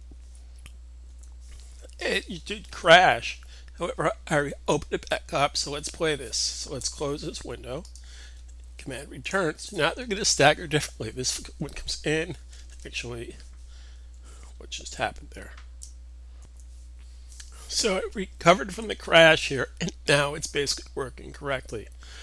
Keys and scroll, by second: 14.1 super+r, 16.3 super+c, 16.3 super+v, 16.3 super+s.